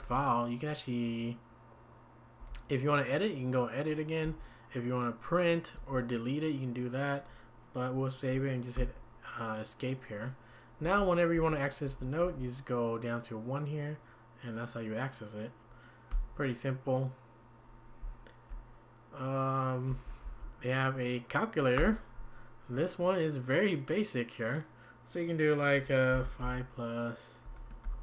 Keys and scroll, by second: 0.0 Up, 2.4 Up, 4.2 Down, 5.8 Down, 8.8 Escape, 10.8 Up, 11.3 Down, 11.9 Up, 12.2 Down, 16.1 Escape, 18.0 Down, 19.9 Down, 20.2 Up, 21.8 Return, 26.1 typing.